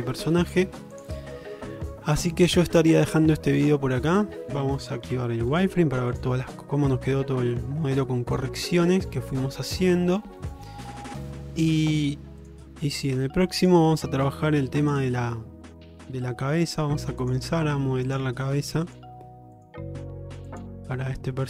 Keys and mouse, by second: 1.0 click, 1.8 shift+middle drag, 2.2 click, 2.7-4.6 middle drag, 5.1 q, 6.2 click, 6.5 middle drag, 6.9-8.9 middle drag, 9.2 shift+middle click, 10.5 shift+middle click, 12.5 click, 13.7 click, 14.3 Tab, 14.9 click, 16.5 g, 18.5 g, 19.6 click, 19.8 g.